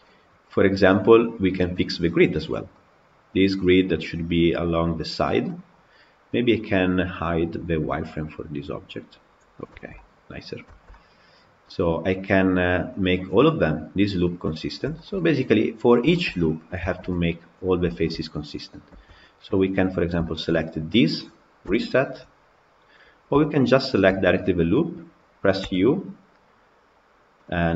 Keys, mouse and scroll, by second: 5.2 scroll down 1, 5.3-6.9 middle drag, 6.9 click, 9.0 click, 9.4 scroll down 2, 9.6 shift+middle click, 10.1 scroll up 2, 10.5-14.5 shift+middle drag, 14.5-14.8 scroll down 3, 14.8 shift+middle click, 15.6 scroll down 2, 16.0 shift+middle click, 16.5 scroll down 1, 16.7 shift+middle click, 17.4 click, 17.7 shift+middle click, 17.9 scroll down 1, 18.0-18.9 scroll up 2, 18.9 Tab, 19.5 click, 20.1-23.7 shift+middle drag, 23.7 alt+click.